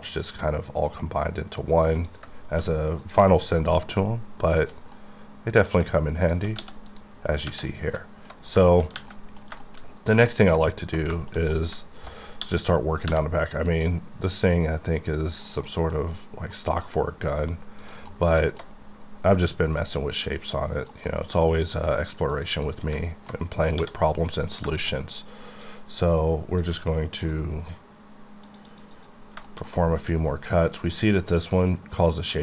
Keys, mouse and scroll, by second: 0.8 ctrl+Num_Lock, 2.1 click, 2.5 3, 3.0 click, 3.6 middle click, 4.9 middle click, 6.2 shift+click, 6.6 x, 6.9 click, 7.3 scroll down 2, 7.6 middle click, 7.9 alt+middle click, 8.3 alt+scroll down 2, 8.7 shift+middle click, 9.1 middle click, 10.3 middle click, 11.2 shift+middle click, 12.2 scroll up 1, 12.4 d, 13.8-15.6 drag, 15.6 middle click, 16.0 scroll down 2, 18.5 alt+middle drag, 18.7-19.8 scroll up 8, 20.1-21.1 drag, 21.4-22.3 scroll down 8, 22.7 middle click, 23.8 d, 24.4 click, 24.7 shift+middle click, 24.9-25.6 shift+scroll up 2, 25.6 shift+click, 28.5 click, 28.7 double click, 28.9 click, 29.3 scroll down 2, 29.5 shift+middle click, 29.7 shift+double middle click, 30.0 scroll up 3.